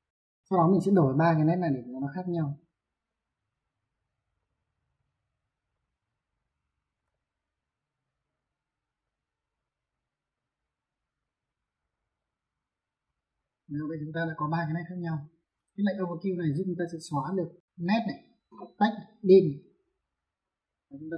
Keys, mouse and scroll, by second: 1.6 click, 2.8 click, 4.1 click, 5.5 click, 6.8 Escape, 7.7 click, 8.8 click, 10.1 click, 11.9 click, 12.8 Escape, 14.8 middle click, 20.4 click.